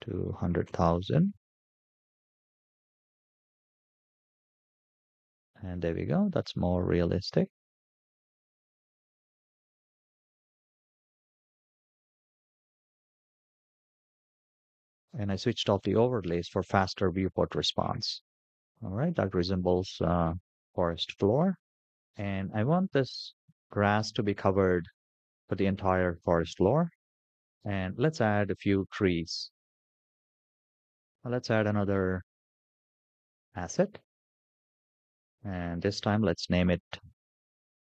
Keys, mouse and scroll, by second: 0.1 KP_0, 0.2 KP_0, 1.1 KP_0, 2.7 click, 4.4-5.0 scroll up 6, 5.6-6.4 middle drag, 6.4 scroll up 1, 6.6 scroll down 3, 8.5 click, 10.3-10.7 middle drag, 11.1 scroll down 1, 12.0 click, 13.3-13.7 middle drag, 14.0 shift+middle click, 16.5-18.5 middle drag, 18.5-19.7 scroll up 3, 19.7 scroll down 3, 20.6-21.0 shift+middle drag, 21.7 shift+middle drag, 26.6 scroll down 2, 29.5-32.7 scroll up 5, 32.7-33.2 scroll up 1, 33.5-37.8 drag.